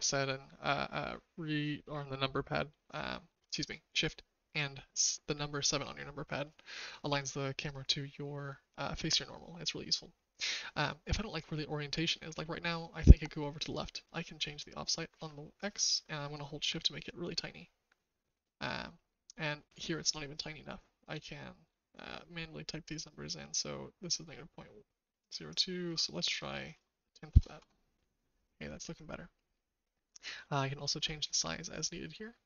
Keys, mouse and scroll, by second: 17.1-21.0 shift+drag, 22.0-25.2 shift+drag, 25.4-27.9 drag, 31.0-32.4 drag.